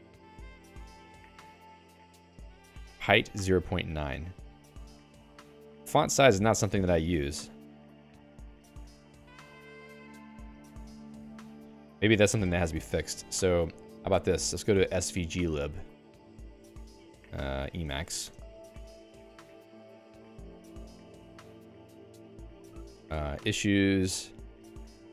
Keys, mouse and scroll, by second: 0.0 Up, 6.8 Up, 9.2 Up, 10.0 Down, 11.3 Page_Down, 12.5 q.